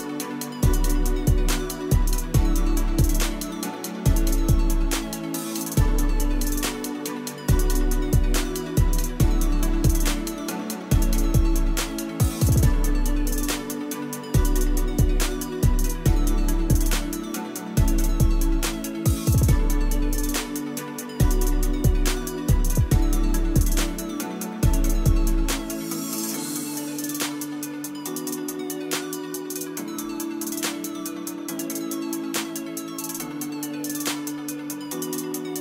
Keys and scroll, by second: 28.7 space.